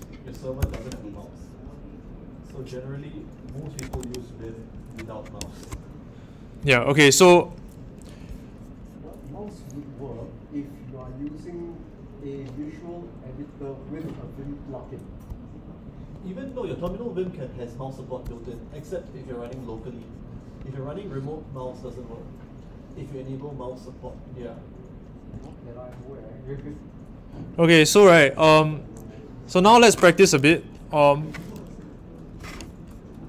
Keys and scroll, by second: 0.6 Return.